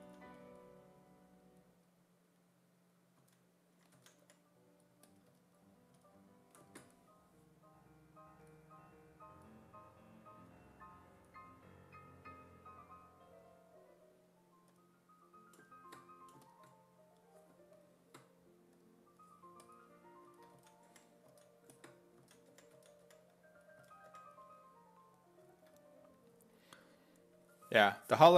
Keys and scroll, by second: 0.0 s, 3.2 s, 4.0 s, 4.3 5, 20.3-24.1 typing.